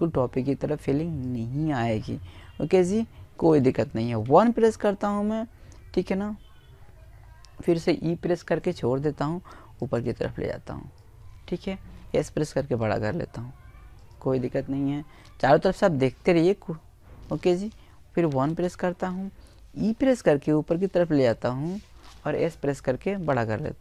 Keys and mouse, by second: 0.1 middle click, 2.0 KP_1, 5.5 middle click, 6.2 e, 6.4-8.4 right drag, 7.6 click, 9.8 s, 12.9 middle click, 16.1 KP_1, 17.6 e, 18.0-19.7 right drag, 18.5 click, 19.7 right click, 20.9 s, 22.7 click, 23.7 e.